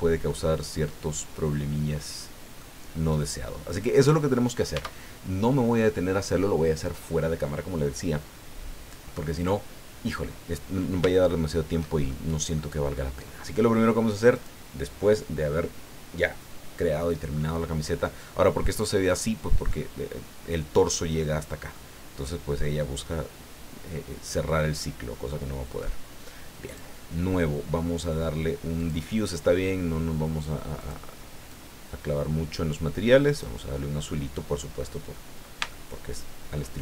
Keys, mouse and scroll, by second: 0.3-2.7 drag, 2.8-3.2 scroll down 1, 3.7-4.7 drag, 4.7 Tab, 11.2 shift+click, 12.1 shift+click, 14.3 click, 18.2 middle click, 19.1-19.8 middle drag, 21.7-22.8 middle drag, 23.0-25.0 middle drag, 25.3-26.0 middle drag, 26.7 click, 28.8 click, 30.8 click, 31.5-33.6 drag, 35.7-36.7 shift+middle drag.